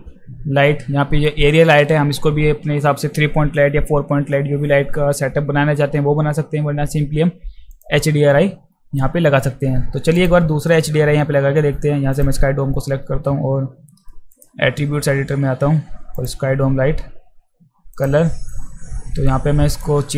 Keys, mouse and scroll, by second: 7.7 click, 10.2 click, 12.1 click, 14.3 click, 16.2 click, 17.9 click, 19.7 click.